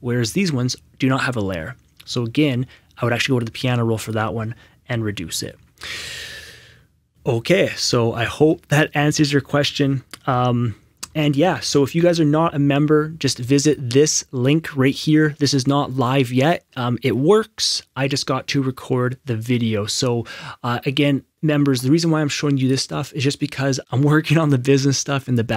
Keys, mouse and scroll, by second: 3.3 click, 3.3 right click, 4.0 right click, 4.0 click, 5.3 click, 5.3 right click, 5.5 Escape, 11.0 Escape, 11.0 alt+Tab, 13.6 click, 14.8-15.5 scroll up 1, 17.5-17.8 scroll down 1, 20.1 scroll up 1, 22.6 click.